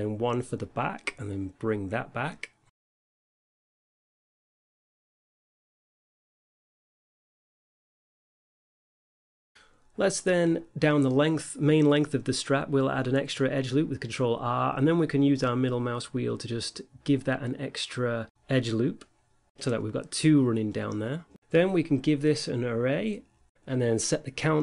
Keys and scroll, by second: 1.6 ctrl+r, 2.6 x, 5.0 a, 5.4 Tab, 6.2 a, 7.9 Tab, 9.6 x, 10.4 a, 12.3 Tab, 14.8 Tab, 15.4 ctrl+r, 16.4 2, 17.6 a, 18.7 Tab.